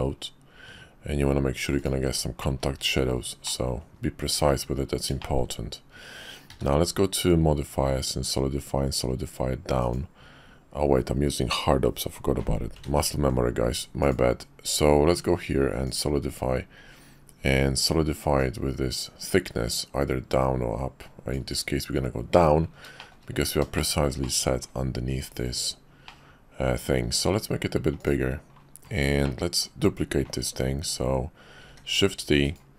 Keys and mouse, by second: 3.4 drag, 3.9 KP_5, 5.2 shift+middle click, 6.5 q, 12.8 ctrl+z, 14.0-16.0 drag, 18.4-19.6 drag, 23.0 shift+middle drag, 23.8 shift+click, 24.2 click, 26.1-26.6 drag, 27.0 s, 29.2-29.7 drag, 31.6 shift+d.